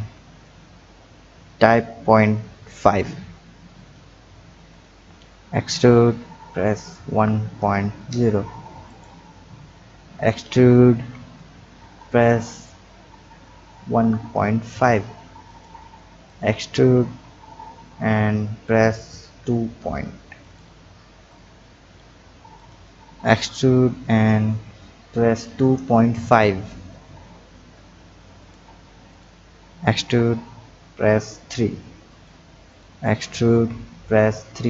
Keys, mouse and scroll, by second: 4.7 click, 5.6 e, 9.4 scroll down 1, 10.2 click, 11.0 e, 16.2 click, 17.0 e, 21.3 click, 22.5 click, 23.3 e, 29.1 click, 29.9 e, 32.7 click, 33.5 e.